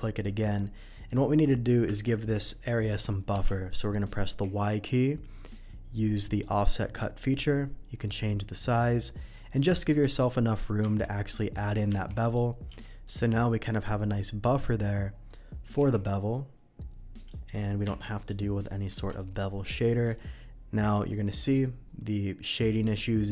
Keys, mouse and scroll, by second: 0.8 alt+middle click, 1.9 ctrl+b, 3.3 Escape, 4.4 y, 6.2 click, 8.0-10.0 drag, 10.8 Tab, 11.9 alt+v, 12.2 click, 12.6 q, 13.0 click, 15.4 middle click, 17.1 click, 17.8 alt+v, 18.2 click, 19.1 alt+a, 19.1-20.1 middle drag, 20.3-21.7 middle drag.